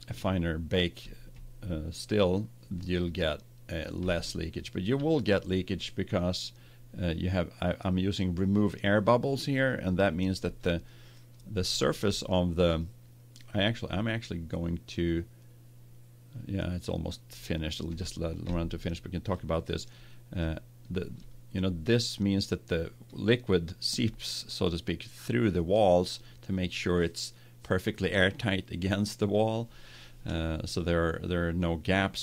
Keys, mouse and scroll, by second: 4.0-5.6 middle drag, 10.0-12.1 middle drag, 12.7 middle click, 18.6 middle click, 20.0 middle click, 21.9 middle click, 23.0-24.5 middle drag.